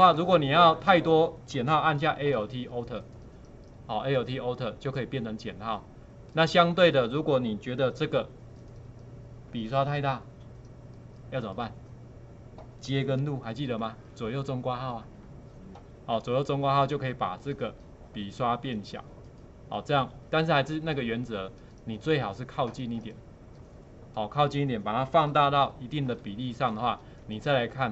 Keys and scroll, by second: 13.8 [, 14.2 [, 15.2 [.